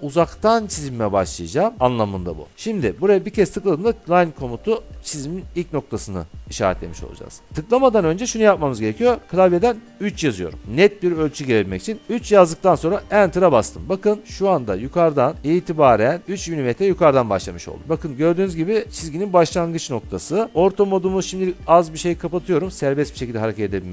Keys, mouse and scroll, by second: 10.2 3, 13.2 Return, 15.3-16.2 scroll, 17.8-18.9 scroll, 21.6 F8.